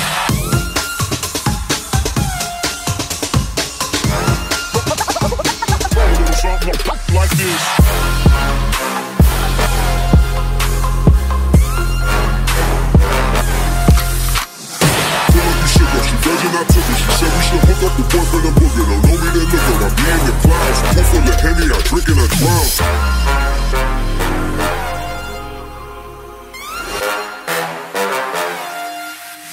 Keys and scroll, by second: 5.5-8.0 typing, 10.9 ctrl+space.